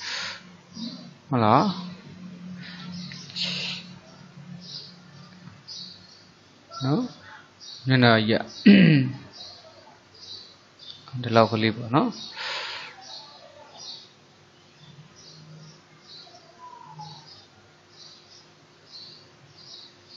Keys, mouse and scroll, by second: 2.4 g, 12.9 click.